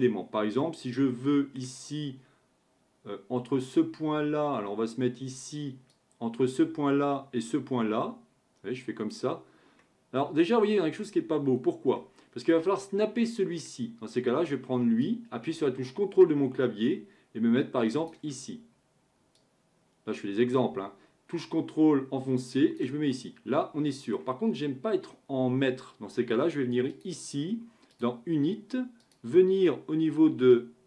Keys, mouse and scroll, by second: 0.0-1.0 scroll down 1, 1.0 scroll down 1, 1.0-4.1 middle drag, 5.9 click, 9.8-11.6 middle drag, 11.6-12.0 scroll down 1, 12.0-15.1 shift+middle drag, 15.1-18.1 drag, 19.4-22.5 drag, 23.1-26.2 middle drag, 26.9 click, 27.9-30.8 drag.